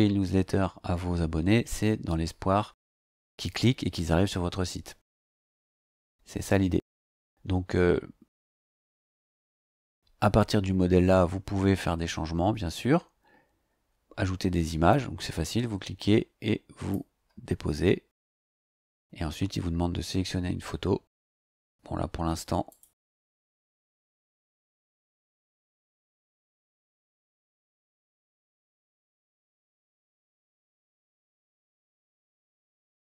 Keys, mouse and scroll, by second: 1.0 scroll down 1, 1.7-2.0 scroll down 2, 5.1-5.9 scroll up 4, 6.9 scroll up 2, 7.9-8.2 scroll down 2, 8.7 click, 9.5 scroll up 2, 14.9-17.1 drag, 18.8 click, 21.2 click, 22.7 click, 24.1 click, 27.7 click, 28.8 click, 29.8-30.1 scroll down 2, 30.6-33.0 scroll down 2.